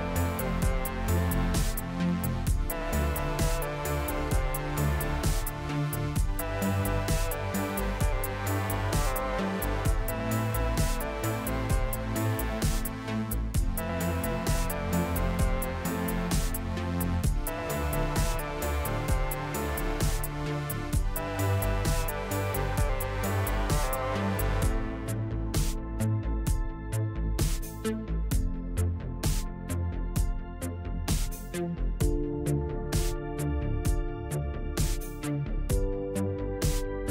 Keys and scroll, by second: 2.5 Tab, 5.1 Tab, 6.3 a, 9.4 s, 14.5 Tab, 15.2 Tab, 19.9 s, 23.3 Tab, 26.7 s, 30.5 Tab, 31.3 Tab.